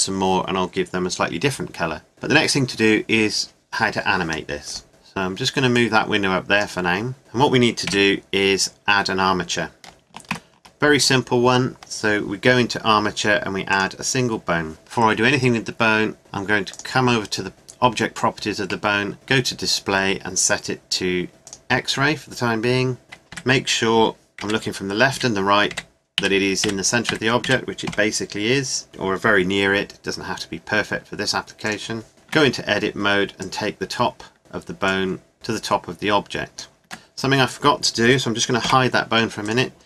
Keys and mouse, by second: 4.7 click, 5.7 click, 7.2 KP_Decimal, 7.9 KP_5, 10.3 shift+a, 21.3 middle click, 23.0 middle click, 23.3 KP_3, 24.4-27.9 typing, 29.7 g, 32.1 KP_1, 32.3 Tab, 34.4 Tab, 35.3 Tab, 36.9 Tab, 38.6 h, 39.5-39.8 drag.